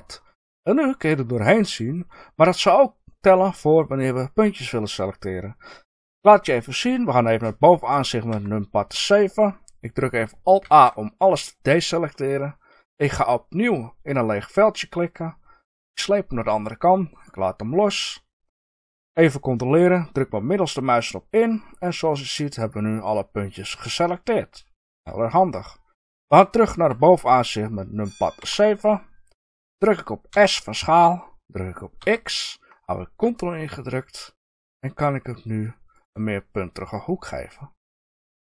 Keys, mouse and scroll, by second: 8.3 KP_7, 10.6 alt+a, 14.1 click, 20.3-36.0 middle drag, 28.4 KP_7, 30.3 s, 36.0 ctrl+click.